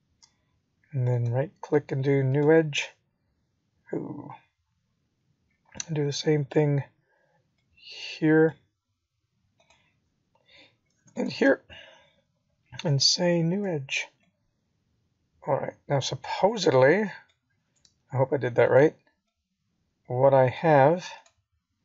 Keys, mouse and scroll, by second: 0.2 click, 1.0 click, 1.8 middle click, 4.2 Tab, 5.0-5.9 scroll up 3, 8.9 shift+click, 11.0 right click, 12.9 middle click, 14.1 scroll up 1, 15.2 click, 18.1 shift+click, 19.6 right click, 21.3 middle click.